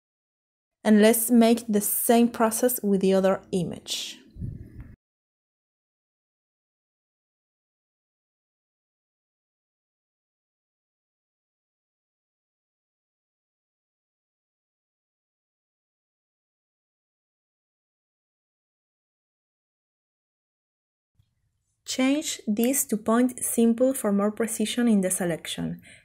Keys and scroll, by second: 11.2 ctrl+c, 14.9 ctrl+v, 20.3-20.8 typing, 20.9 Return.